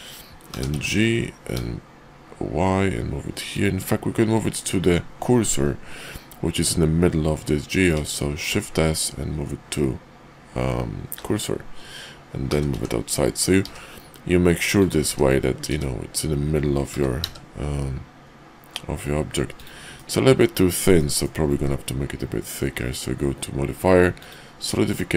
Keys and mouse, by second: 0.5 g, 8.4 shift+s, 12.4 g, 15.1 `, 15.6 `, 16.9 g, 19.9 middle click, 20.9 click, 21.5 q.